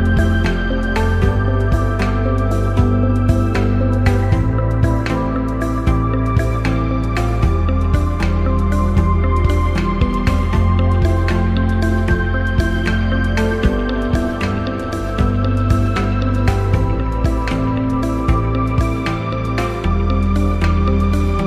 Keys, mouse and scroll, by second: 1.8 click, 5.0 click, 7.7 click, 9.2 click, 9.7 click, 12.9 click, 16.0 click, 17.8 click, 18.5-21.0 alt+drag.